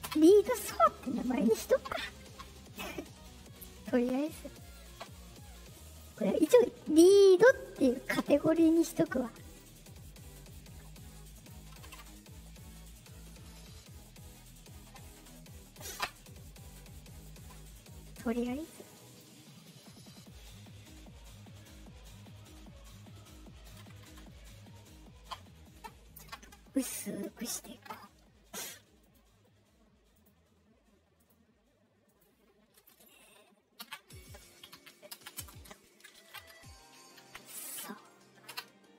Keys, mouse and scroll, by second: 0.0 Return, 3.7 middle click, 3.7 scroll, 4.5 click, 5.8 click, 9.4 click, 10.4-11.4 drag, 13.2 scroll up 2, 15.8 scroll up 2, 16.4 scroll up 2, 17.1 click, 18.2 click, 19.7-23.6 drag, 23.9 Return, 28.9 click, 29.2 middle click, 30.1 click, 31.1 click, 32.0 click, 35.3 space, 36.2 shift+s, 37.1 a, 37.6 w.